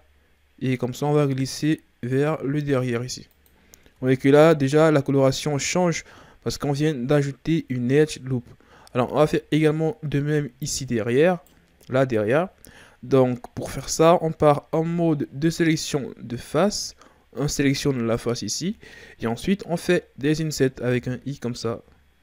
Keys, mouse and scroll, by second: 3.8 Tab, 5.0-6.4 ctrl+scroll up 3, 6.4-8.2 ctrl+scroll down 2, 8.8 Tab, 10.2-11.2 middle drag, 11.2 right click, 14.7 ctrl+Tab, 18.0 right click, 20.9 i.